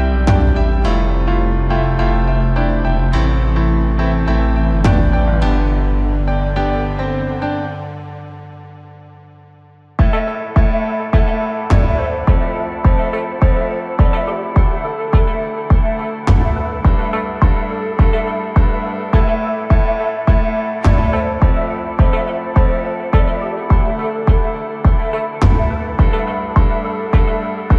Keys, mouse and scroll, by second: 0.1-1.0 scroll up 2, 1.0 m, 3.4-6.0 drag, 6.0-6.8 scroll down 2, 6.8-8.3 middle drag, 8.3 KP_Divide, 8.6 KP_7, 9.6-10.8 scroll up 1, 11.3-11.7 scroll down 1, 11.7-13.4 middle drag, 13.4 KP_7, 14.5-15.3 scroll up 2, 15.3 e, 18.8 scroll down 1, 19.1 middle click, 19.9 KP_Divide, 21.1 a, 21.4 3, 22.0-23.1 middle drag, 24.5 click, 24.7-26.1 scroll up 1, 26.1 shift+n.